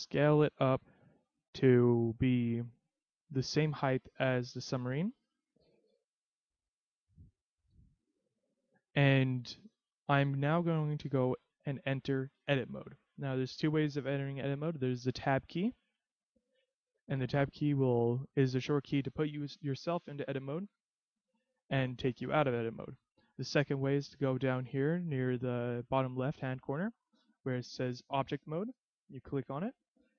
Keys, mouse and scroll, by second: 1.4 click, 2.4 click, 5.7 middle click, 7.6 KP_3, 9.3-10.2 scroll down 2, 10.2-11.0 scroll up 1, 16.0 Tab, 20.6 Tab, 29.0 click.